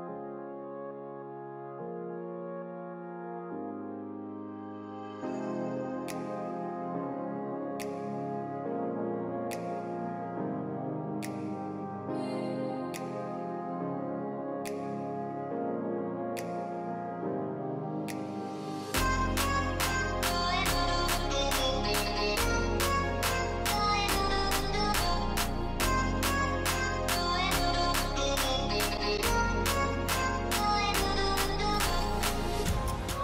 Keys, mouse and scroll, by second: 1.6 alt+click, 3.2 alt+scroll up 1, 4.8 alt+click, 6.8 scroll down 2, 7.8 alt+scroll down 1, 8.5-8.8 alt+scroll down 4, 9.4-10.1 alt+scroll up 1, 12.3 scroll up 1, 14.0 alt+scroll up 1, 15.5-16.2 alt+scroll down 1, 20.0 alt+click, 21.7 alt+scroll up 1, 22.5 alt+click, 23.2 scroll down 1, 26.3 alt+click, 26.7 alt+click, 31.0 alt+click, 31.6 alt+scroll down 1, 32.1-33.0 alt+scroll up 1.